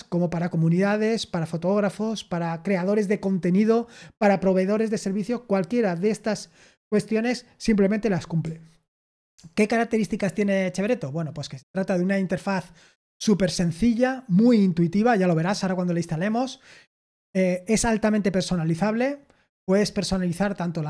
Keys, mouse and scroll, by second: 2.4-5.3 scroll down 4, 5.3-7.1 scroll down 1, 7.1-8.8 scroll down 1, 8.8 super+7, 10.7-11.3 scroll down 1, 11.3-13.5 scroll up 2, 13.5-14.8 scroll up 1.